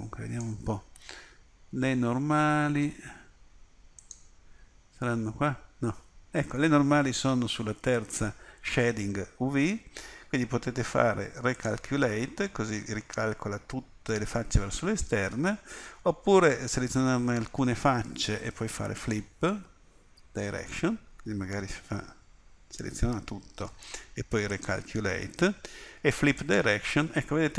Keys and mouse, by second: 21.9 a.